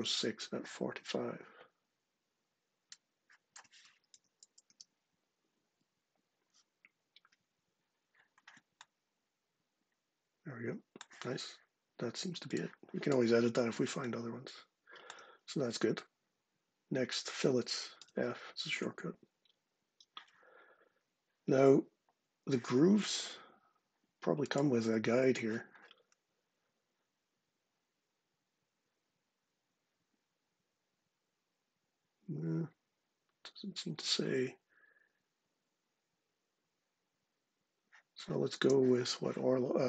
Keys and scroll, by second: 3.6-4.9 typing, 5.4 Tab, 17.8 f, 38.3 space.